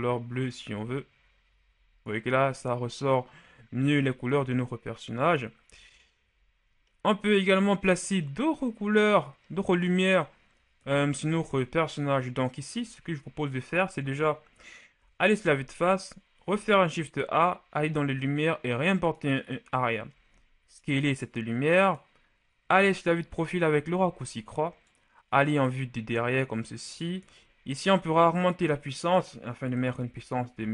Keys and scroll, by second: 10.7 KP_1, 12.6 KP_3, 14.8 KP_1, 16.3 a, 20.0 s, 22.5 KP_3, 29.7 KP_1, 29.8 KP_0, 30.0 KP_0, 30.4 KP_0.